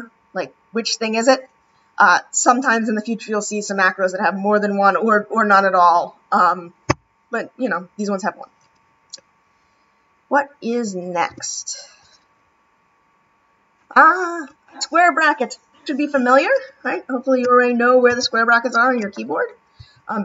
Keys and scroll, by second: 17.4 [, 18.1 ].